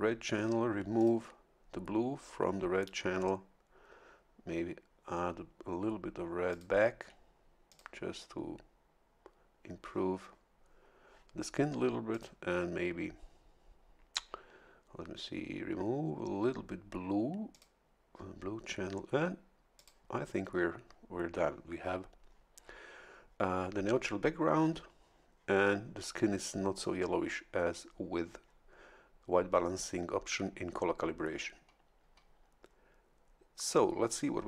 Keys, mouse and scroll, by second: 1.0 click, 6.5 click, 7.7 click, 12.1 click, 17.5 click, 19.7 click.